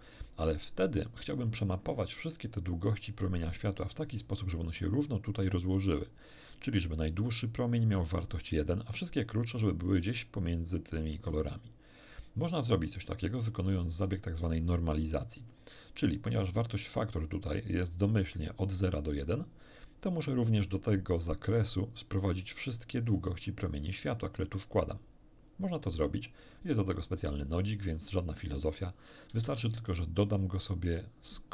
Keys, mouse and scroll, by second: 13.0-14.6 drag, 17.4 click, 18.6-20.4 drag, 23.1-24.8 drag, 26.4 scroll up 1, 27.0 scroll up 1, 27.9-28.8 drag, 29.3 shift+a.